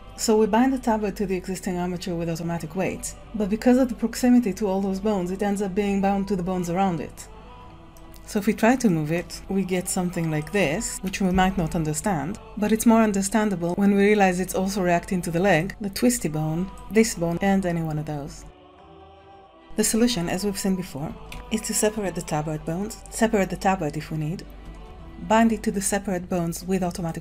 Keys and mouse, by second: 2.0 ctrl+p, 7.8 ctrl+Tab, 8.0 click, 8.4 shift+click, 8.9 r, 9.5 r, 9.9 click, 10.0 r, 10.5-10.9 drag, 11.6 click, 11.8 middle click, 12.2 click, 13.1 g, 16.1 r, 16.8 click, 16.8 g, 16.9 g, 17.3 click, 17.6 middle click, 17.7 g, 20.9 Tab, 24.4 ctrl+p.